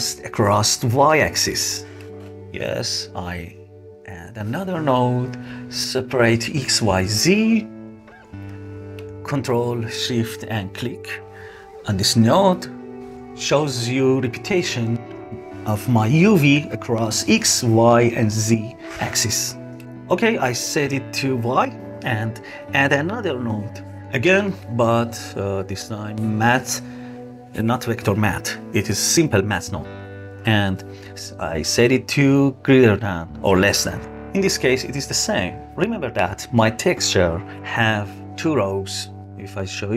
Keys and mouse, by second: 2.1 shift+a, 9.9 click, 12.3 ctrl+shift+click, 14.0 ctrl+shift+click, 14.9 ctrl+shift+click, 15.6 ctrl+shift+click, 16.4 ctrl+shift+click, 17.0 ctrl+shift+click, 19.8-20.8 middle drag, 22.1 shift+a, 30.3-34.0 drag, 36.6 middle click, 38.1 ctrl+shift+click, 39.8 middle click.